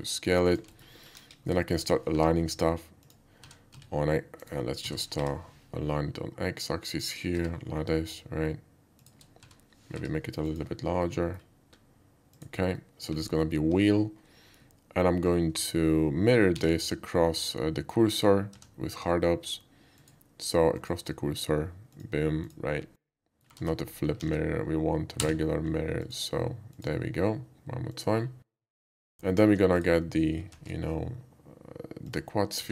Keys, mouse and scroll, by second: 0.5 click, 0.7 alt+middle click, 0.9 alt+middle click, 1.2 KP_5, 1.6 shift+middle click, 2.1 g, 3.0 click, 3.4-5.2 typing, 4.4 right click, 6.4 s, 6.9 click, 7.3 g, 9.0 shift+click, 9.4 s, 10.0 y, 10.1 s, 10.5 click, 11.0-11.4 middle drag, 11.6 s, 12.3 click, 12.7-13.0 middle drag, 13.2 alt+middle click, 13.4 alt+middle click, 16.6 alt+x, 18.6 Tab, 19.0 Tab, 20.0 click, 20.8 click, 22.0 click, 22.4 click, 22.7 scroll down 1, 23.0-23.4 middle drag, 23.6 ctrl+z, 24.2 alt+x, 25.2 x, 26.0 click, 26.7 click, 27.9 click, 28.2 middle click, 28.5 middle click, 28.8 alt+middle click, 29.0 alt+middle click, 29.3 alt+middle click, 29.7 alt+click, 30.5 shift+a, 32.0 click, 32.6 s.